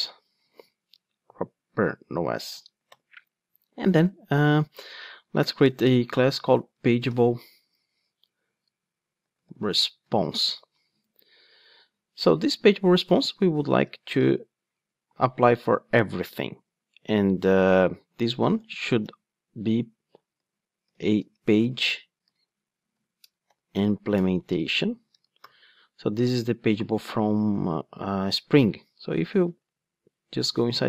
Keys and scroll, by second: 2.9 super+n, 19.0 Return, 24.2 Return, 29.5 super+b.